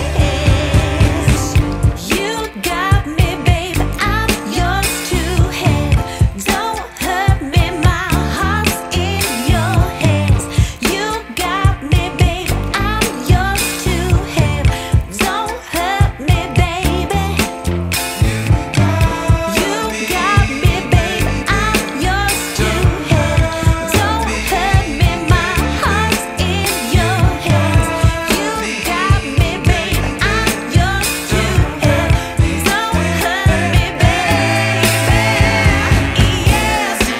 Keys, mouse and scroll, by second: 0.2-0.7 scroll down 3, 0.7 scroll up 1, 0.8 scroll down 1, 0.9-1.3 scroll up 3, 2.1 click, 7.1 right click, 9.4 click, 10.3 click, 11.5 click, 12.3 click, 14.3 click, 22.5-23.7 scroll down 1, 23.9 F10, 25.9 shift+a, 30.6 Tab, 31.6-32.2 typing, 33.5-35.3 typing, 36.7 Tab.